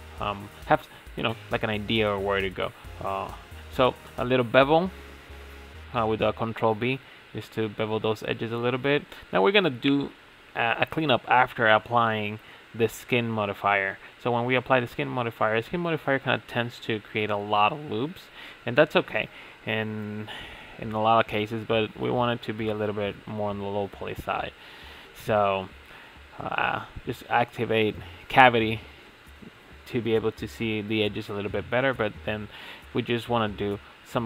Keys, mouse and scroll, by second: 0.4 ctrl+b, 5.0-6.6 middle drag, 6.6 Tab, 6.8-8.0 middle drag, 8.0 click, 8.2 Tab, 8.3 scroll up 1, 8.4 shift+middle click, 8.7 scroll down 3, 8.8 shift+middle click, 9.0 alt+click, 9.4 3, 9.5-10.6 alt+shift+drag, 10.7 shift+middle click, 11.4 scroll up 5, 11.5 middle click, 11.8-13.5 typing, 12.5 click, 13.9 shift+middle click, 14.5 s, 15.0 middle drag, 15.2 Tab, 15.3 middle click, 15.5 Tab, 15.5 shift+middle click, 15.7 scroll up 2, 15.8 middle click, 16.2 ctrl+r, 16.7 shift+middle click, 16.9 ctrl+r, 17.2 ctrl+r, 17.5 shift+middle click, 17.6 ctrl+r, 18.1-18.5 shift+middle drag, 18.5 ctrl+r, 18.9 shift+middle click, 19.0 ctrl+r, 19.4 shift+middle click, 19.5 ctrl+r, 19.8 shift+middle click, 19.9 ctrl+r, 20.2 shift+middle click, 20.3 ctrl+r, 20.6 Tab, 20.7 scroll down 3, 21.1-24.2 drag, 26.8-27.1 middle drag, 27.1 click, 27.5 Tab, 28.7 a, 29.4 ctrl+a, 32.0 click, 33.1 click, 33.4 Tab, 33.9 a.